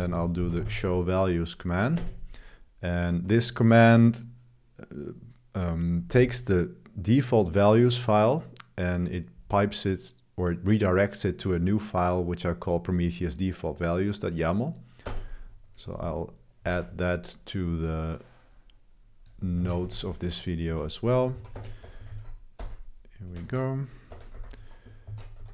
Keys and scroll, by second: 0.0-1.1 typing, 2.0 Return, 2.8 typing, 15.0 Return, 19.6-24.6 typing, 22.1 super+v, 25.1 ctrl+b.